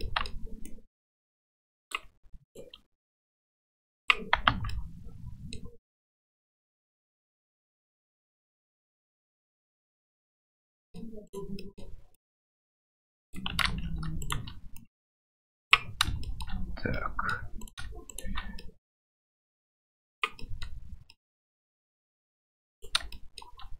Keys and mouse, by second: 0.0 middle click, 0.7-1.9 drag, 2.5 right click, 3.1 click, 4.5 Tab, 4.7 middle drag, 6.0-8.0 middle drag, 8.6 middle click, 9.1 Tab, 9.5-10.9 middle drag, 11.2 right click, 11.5 middle click, 12.1-13.3 drag, 13.6 ctrl+z, 14.2 shift+right click, 14.8 click, 17.0 middle click, 17.6 right click, 18.1 shift+right click, 20.5 middle click, 21.2 middle click, 23.2 shift+click, 23.3 shift+middle click.